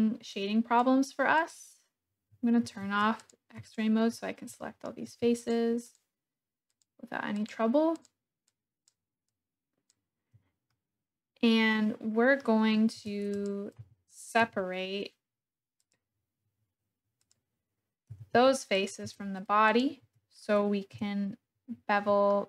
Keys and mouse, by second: 0.3 click, 2.6 alt+z, 3.1 click, 3.6 shift+click, 4.6 shift+click, 6.7 shift+click, 7.3 shift+click, 7.9 shift+click, 8.4 shift+click, 9.2 shift+click, 10.7 click, 11.4-12.4 middle drag, 13.0 Tab, 13.7 g, 14.4 y, 15.9 click, 17.3 click, 18.1 g, 18.4 y, 18.8 click, 19.0 Tab, 19.6 click, 20.0 Tab, 20.9 KP_1, 22.2 shift+click.